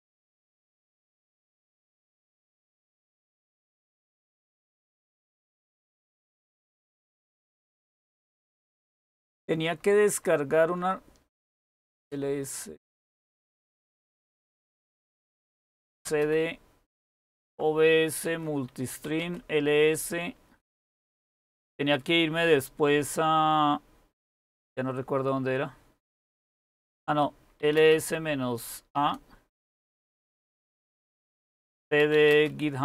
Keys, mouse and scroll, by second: 2.2 typing, 2.5 Return, 7.0 ctrl++, 7.6 ctrl++, 7.8-15.7 ctrl++, 15.4-18.8 typing, 19.0 Tab, 19.2 Return, 27.0-27.9 typing, 28.9-29.7 typing, 31.1-32.8 typing.